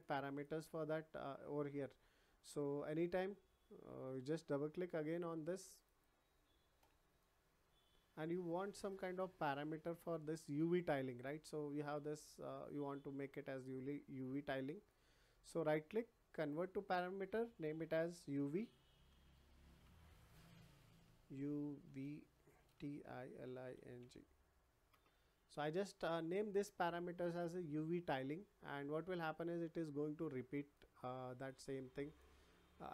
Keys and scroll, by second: 18.9 shift+y, 19.8 BackSpace, 20.9-23.7 typing, 24.9 Return.